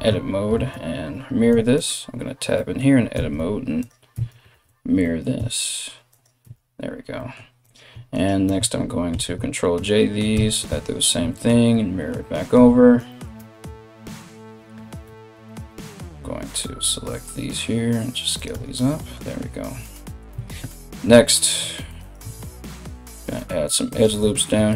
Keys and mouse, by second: 0.2 alt+x, 1.1 Tab, 1.3 right click, 2.8 alt+x, 3.7 Tab, 4.1 alt+x, 5.0 z, 5.7 right click, 6.0 Tab, 7.2 right click, 7.7 shift+right click, 8.7 ctrl+j, 9.9 Tab, 10.3 alt+x, 10.8 Tab, 13.0 Tab, 14.6 3, 15.1 alt+right click, 15.2-24.7 alt+middle drag, 15.7 alt+s, 18.1 Tab, 19.9 Tab, 21.0 ctrl+r, 22.3 g, 24.2 ctrl+r.